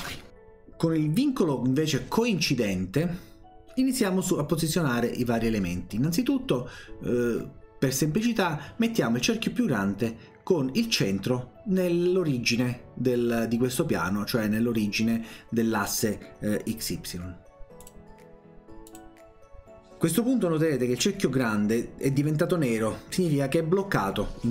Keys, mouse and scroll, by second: 8.2 click, 17.9 click, 18.9 click.